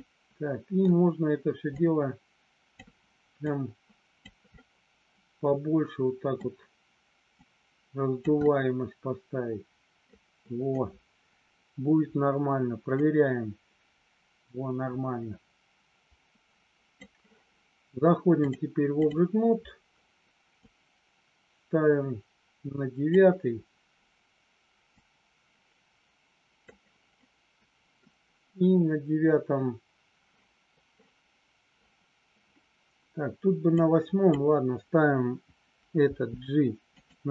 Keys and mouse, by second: 1.8 click, 3.4 click, 4.5-6.3 middle drag, 7.3 click, 8.4-9.9 middle drag, 13.1-16.9 drag, 18.3 click, 20.5-23.1 drag, 25.1-26.7 drag, 27.2 middle click, 33.7 click, 36.0 g, 36.9 click.